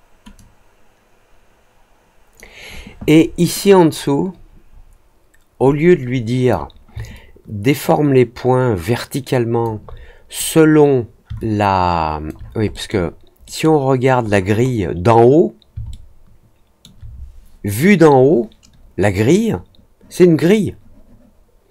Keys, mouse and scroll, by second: 0.3-2.3 drag, 3.6-6.4 drag, 7.1-9.6 alt+drag, 11.3 alt+click, 12.7 middle click, 13.4 middle click, 14.2-14.7 scroll up 2, 15.8 alt+middle click.